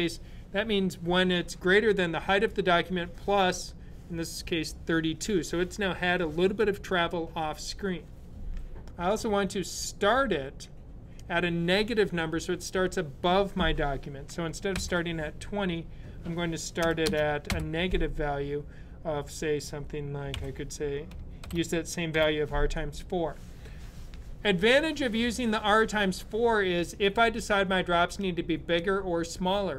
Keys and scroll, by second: 14.6 space, 17.3 space, 20.0 typing, 21.7-22.4 typing.